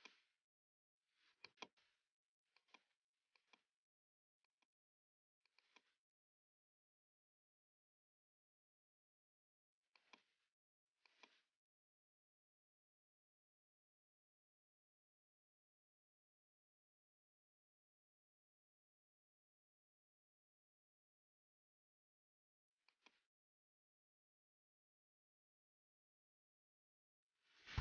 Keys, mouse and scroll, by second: 0.2 right click, 1.5 click, 2.6 click, 3.6 click, 5.0 click, 10.3 click, 12.8 click, 16.3 click, 18.7 ctrl+z, 19.4 ctrl+z, 22.9 click, 25.4-27.2 typing.